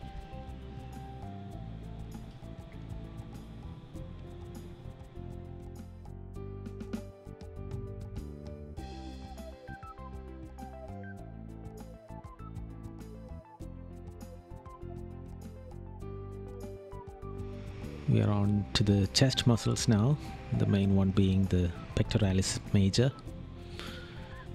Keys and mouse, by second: 3.4 right click, 5.5 right click, 6.6 right click, 8.2 right click, 9.0 right click, 12.3 right click, 14.3 right click, 15.5 right click, 16.0 right click, 22.1 right click.